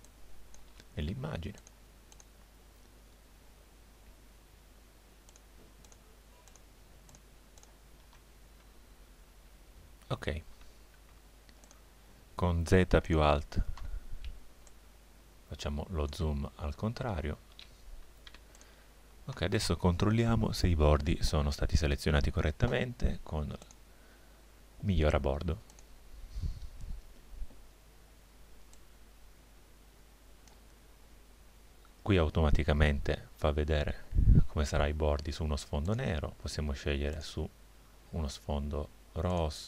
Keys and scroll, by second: 10.6 z, 14.3 space, 18.3 z.